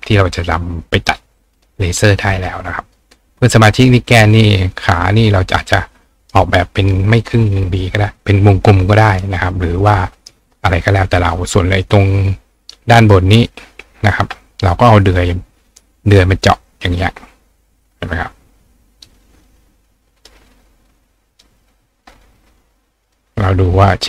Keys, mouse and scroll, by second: 0.8 click, 2.8 click, 3.6 click, 4.7 click, 6.2 click, 9.8 click, 10.2 right click, 13.0 click, 14.0 click, 16.1 click, 16.7-19.0 drag, 20.2 click, 21.0 click, 23.1 click.